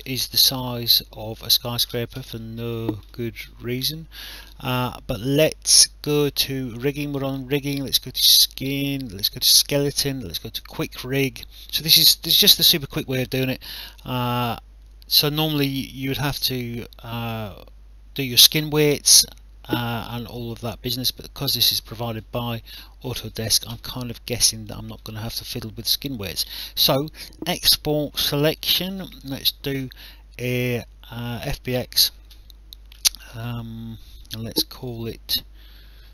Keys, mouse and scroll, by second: 1.0 alt+click, 1.4 alt+middle click, 7.8 click, 10.6 click, 14.0 click, 22.3 alt+click, 24.6 click, 28.5 click, 34.7 click.